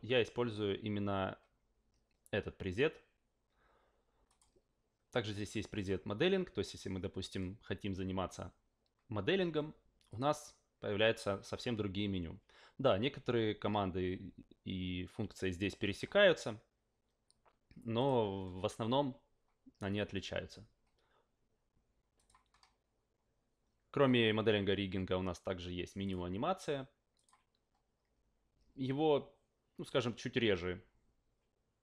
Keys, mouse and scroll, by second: 4.3 click, 5.7 click, 10.1 click, 18.0 click, 22.1 click, 26.0 click, 27.1 click.